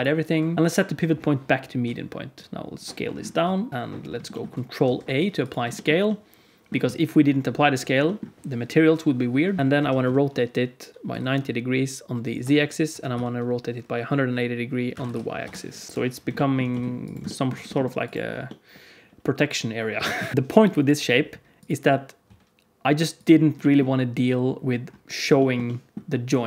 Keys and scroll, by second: 0.3 q, 2.4 s, 3.3 s, 3.7 KP_Decimal, 4.7 ctrl+a, 9.6 r, 9.7 r, 12.8 r, 15.9 KP_1, 16.6 g, 17.6 g, 22.2 s.